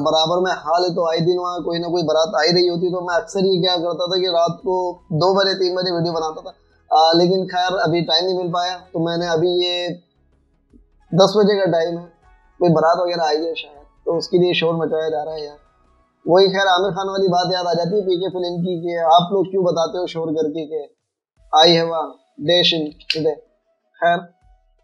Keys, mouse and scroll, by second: 20.7 ctrl+a, 23.3-24.4 typing.